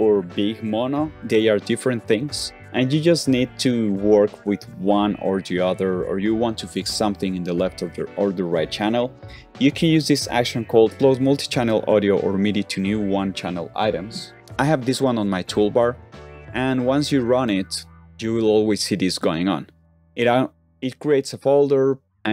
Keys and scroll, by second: 20.5 o.